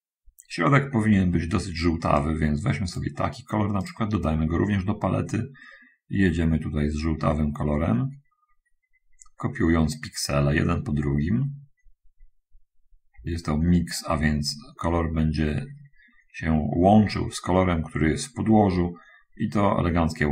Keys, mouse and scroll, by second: 2.5 click, 4.1 click, 5.2-20.3 drag.